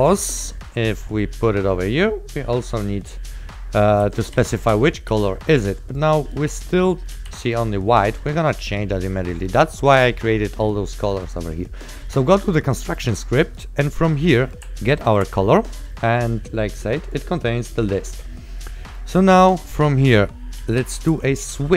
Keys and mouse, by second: 4.0 right click, 5.2 s, 7.0-7.9 typing, 9.6 click, 13.6 right click, 14.7 click, 14.8 ctrl+click, 20.9 w, 21.3 t.